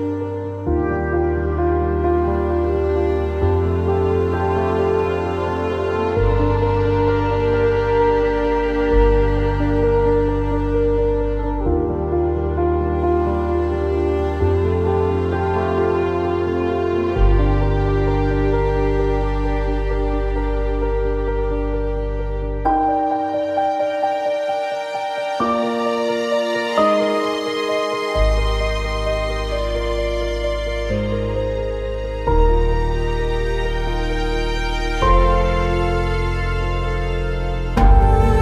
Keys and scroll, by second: 18.8 q, 20.3 w, 22.0 e, 28.3 e.